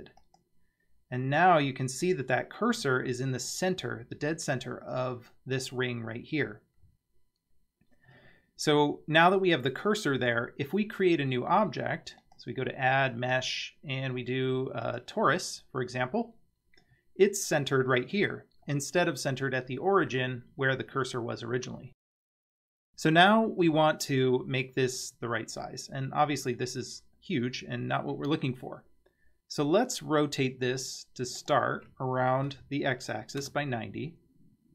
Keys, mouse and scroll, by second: 1.2-2.8 middle drag, 10.2 Tab, 12.2-15.0 drag, 15.9-16.9 scroll down 5, 16.9 scroll up 4, 18.7-19.5 scroll down 3, 25.1-26.2 scroll up 2, 26.2 scroll down 2, 31.4-34.1 drag.